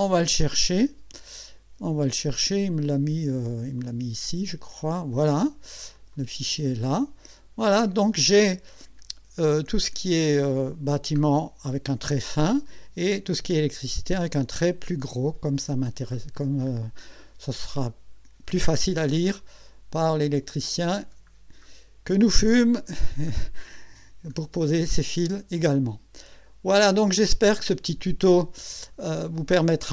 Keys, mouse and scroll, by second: 0.1 click, 3.8 click, 5.9 click, 7.2-8.4 scroll down 6, 9.4 scroll up 2, 10.3 scroll up 2, 11.2-11.6 scroll down 2, 12.3 scroll down 2, 15.1-16.1 scroll down 4, 16.4-16.7 scroll up 2, 17.7 click, 19.2-19.5 scroll up 2, 20.3 click, 21.2-21.6 scroll down 2, 22.3-22.7 scroll up 2, 23.1-23.4 scroll down 2, 24.9 scroll up 2, 27.2 click, 28.9 click.